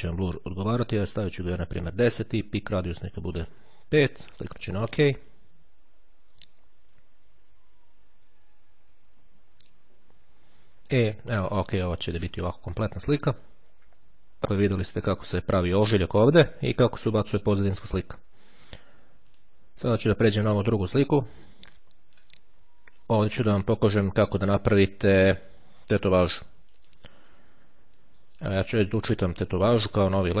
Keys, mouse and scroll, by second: 1.2 KP_1, 4.4 click, 11.2-11.6 ctrl+scroll up 2, 19.0-20.1 drag, 20.7-22.8 drag, 26.8 click, 28.0-29.1 drag, 29.7-30.4 drag.